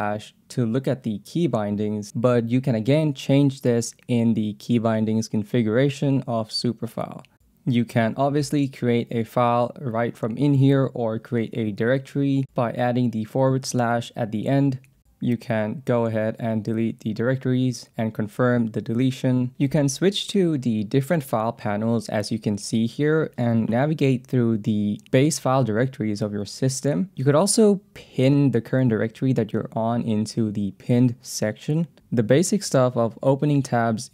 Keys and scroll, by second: 1.0 j, 2.2-9.0 typing, 11.0 Return, 11.7-13.7 typing, 14.2 Return, 15.0 k, 17.4 d, 19.5 j, 21.4 ctrl+p, 22.9 Return, 24.5 ctrl+s, 25.0 j, 25.4 k, 27.1 j, 27.4 ctrl+s, 27.6 j, 28.5 k, 29.7 ctrl+s, 31.2 shift+p.